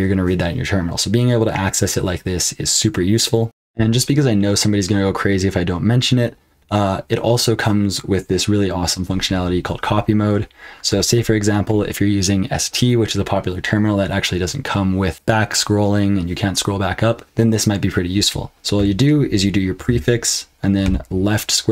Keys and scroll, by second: 3.4 super+l, 3.4 super+h, 3.4 F12, 19.7 ctrl+b, 20.8 [.